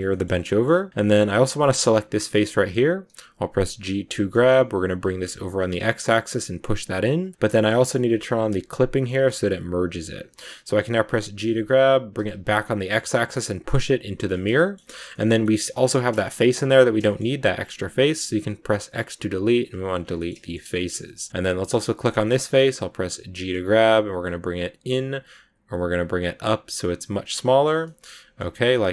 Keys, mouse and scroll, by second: 0.0 shift+middle click, 0.6-0.9 scroll up 1, 1.7 right click, 2.2-3.7 middle drag, 3.7 g, 8.6 click, 11.2 g, 14.2-17.4 shift+middle drag, 17.4 x, 19.9 scroll down 1, 19.9 scroll up 1, 20.0-21.9 shift+middle drag, 20.9 shift+scroll up 1, 21.9 right click, 22.1-23.3 shift+middle drag, 23.3 g, 27.3-28.9 middle drag.